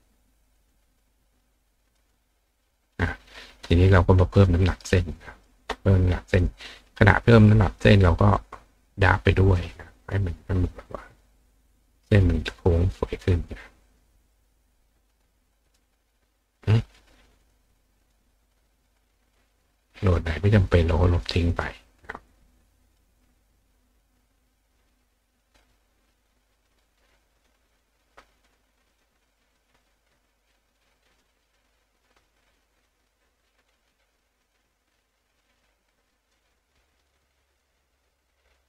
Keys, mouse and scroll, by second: 0.5 click, 1.9 click, 4.9 click, 6.4 click, 7.3 click, 8.3 click, 9.8-11.2 drag, 11.4 click, 12.5 click, 13.4 click, 13.8 click, 14.3 click, 15.6 click, 15.8-17.5 drag, 18.0 click, 18.8 click, 19.0 click, 19.3 click, 20.1-21.2 drag, 21.5 click, 21.9 click, 22.3 click, 22.8 click, 24.5 click, 26.6 click, 27.7 click, 28.4 click, 28.9 click, 29.9-31.2 drag, 32.8-34.6 drag, 35.6 click, 37.0 click, 38.0 click.